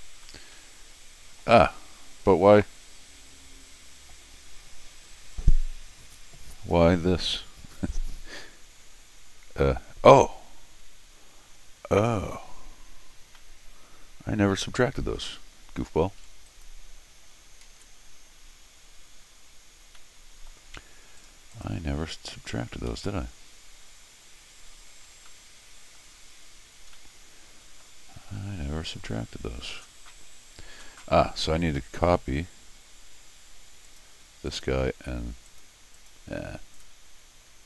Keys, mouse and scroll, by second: 13.4 middle click, 13.8 middle click, 16.5 click, 17.6 ctrl+alt+r, 20.0 middle click, 21.2 click, 21.5 click, 22.9 ctrl+alt+r, 25.1 scroll down 2, 25.3 middle click, 26.6 scroll down 1, 26.9 middle click, 28.1-28.7 scroll up 3, 28.9 middle click, 31.6 click, 33.9 click, 34.5 click, 35.5 click, 36.0 click, 36.7 click, 37.1 middle click.